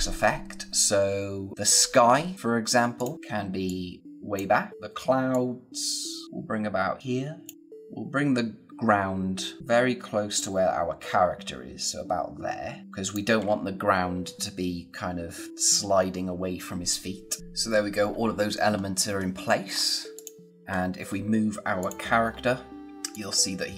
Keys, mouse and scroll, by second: 1.5 scroll down 1, 1.7-2.1 scroll up 1, 2.3 click, 9.6-10.3 scroll up 1, 10.3 click, 18.6 scroll down 1, 19.7 scroll up 1, 20.1 click, 20.5 space, 20.6-21.3 scroll up 1, 21.7 click, 22.8-23.1 scroll up 1, 23.1 click.